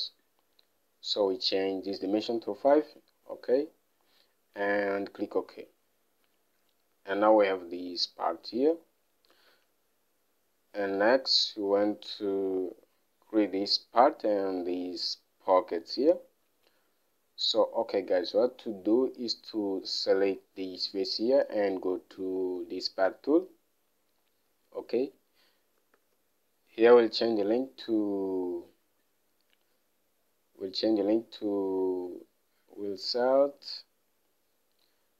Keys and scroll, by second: 0.4 alt+Tab, 2.8 typing, 9.9 alt+Tab, 18.6 alt+Tab, 26.4 alt+Tab.